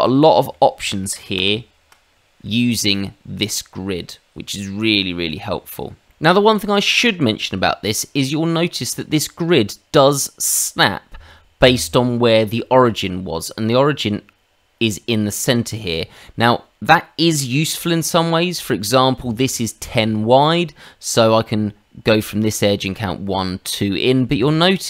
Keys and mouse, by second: 0.1 middle click, 1.3 ctrl+z, 8.0 middle click, 12.7 click.